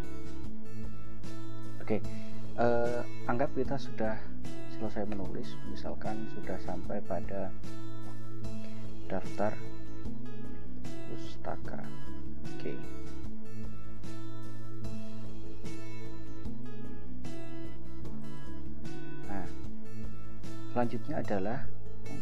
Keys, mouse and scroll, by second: 0.0-1.7 typing, 5.2 ctrl+Return, 8.2-12.7 typing, 14.0 click, 16.7 click, 18.3 click, 19.4 scroll up 2, 20.3 scroll up 2.